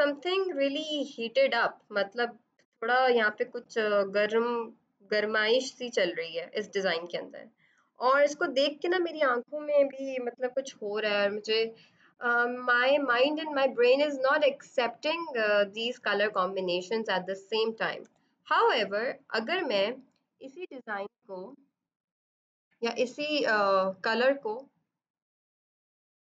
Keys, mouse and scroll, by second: 17.9 b, 24.8 click.